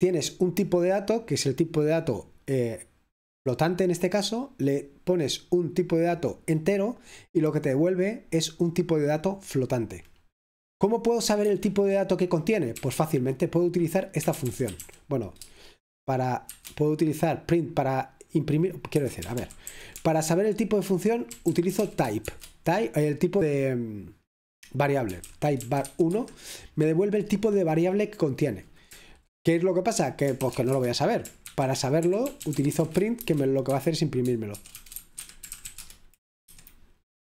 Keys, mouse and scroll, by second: 0.0-9.8 drag, 10.1-10.8 scroll down 1, 10.8-12.6 scroll down 1, 12.6 scroll down 1, 12.7 typing, 14.1-14.8 typing, 19.0 Escape, 19.4-21.9 typing, 23.4-26.4 typing, 27.6 typing, 30.5-36.1 typing, 36.5 F5.